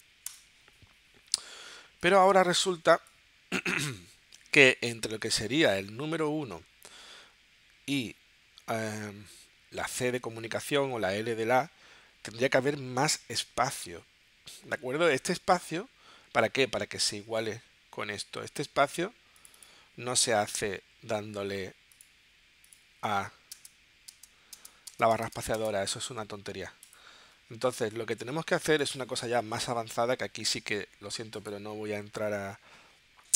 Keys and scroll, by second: 0.3 BackSpace, 2.9 space, 23.5 space.